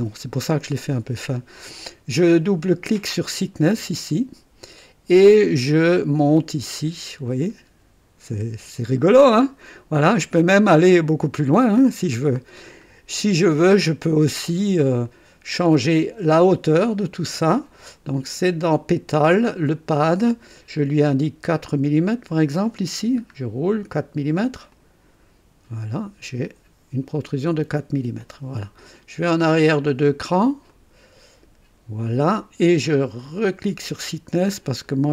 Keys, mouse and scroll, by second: 3.3 click, 5.6 scroll up 2, 6.3-7.4 scroll up 6, 8.8 scroll up 2, 10.1-10.5 scroll up 2, 10.7 scroll up 2, 13.8 click, 15.0 click, 18.6 click, 19.7 click, 21.2 scroll up 1, 22.6 click, 23.3 scroll up 1, 24.7 click, 25.8-28.4 drag, 29.5 click, 30.7 click, 33.2 click, 34.9-35.1 scroll up 5.